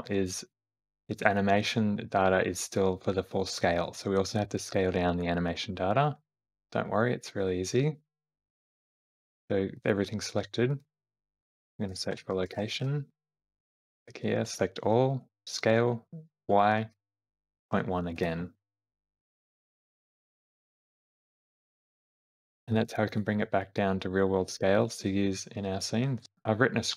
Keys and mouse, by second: 8.3-13.8 drag, 14.2 a, 15.4 s, 20.5 shift+Left, 20.7 space, 21.8 shift+middle click, 22.0 middle click, 22.8 shift+middle click, 23.2 click, 24.5 shift+click.